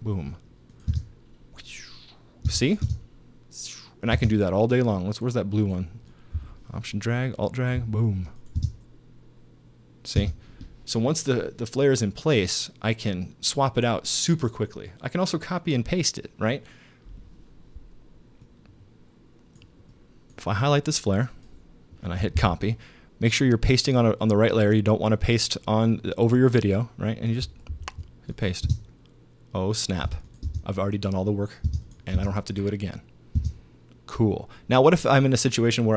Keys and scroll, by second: 0.9 space, 2.5 space, 4.2 space, 8.6 alt+space, 10.2 space, 22.4 super+c, 27.7 super+v, 28.7 super+space, 30.0 space, 33.4 space.